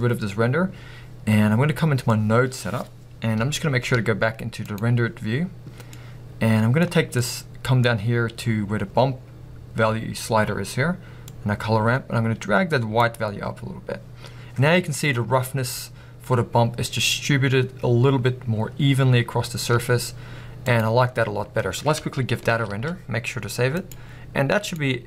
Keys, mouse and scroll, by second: 0.0-3.5 drag, 3.5-11.4 middle drag, 3.5 z, 11.4-24.9 drag, 15.7-16.7 scroll up 2, 20.2 z.